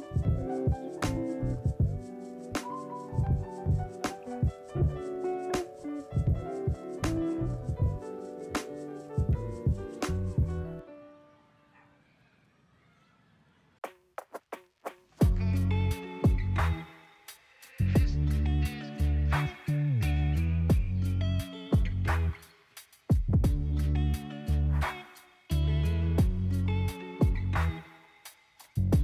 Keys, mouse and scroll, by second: 2.4 shift+click, 2.9 shift+click, 3.4 shift+click, 3.7 shift+click, 4.9 shift+click, 7.5 ctrl+p, 8.2 click, 9.1-9.6 scroll down 3, 9.8 middle click, 10.7 click, 11.7 click, 12.5-17.1 shift+middle drag, 17.1 r, 23.3 click, 24.3-25.9 middle drag, 25.9 click, 27.1-28.7 middle drag, 28.7 click.